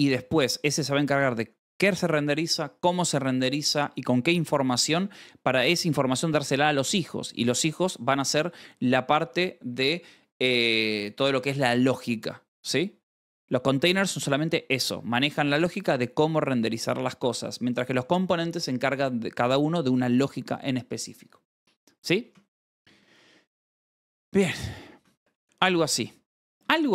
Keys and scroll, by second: 21.5 Escape, 21.8-26.3 typing, 24.9 ctrl+s.